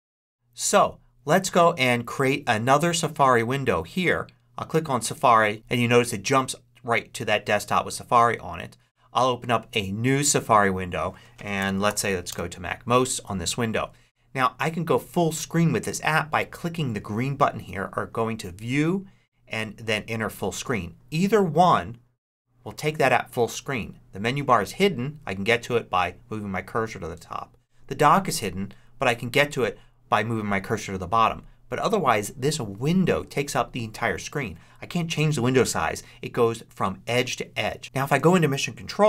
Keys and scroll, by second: 11.2-12.0 typing, 12.2 Return.